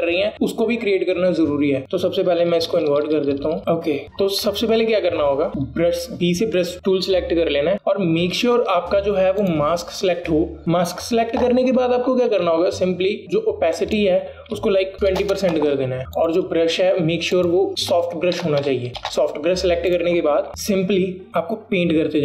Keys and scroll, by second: 3.6 ctrl+z, 6.5 alt+b, 16.0 KP_0, 16.1 Return.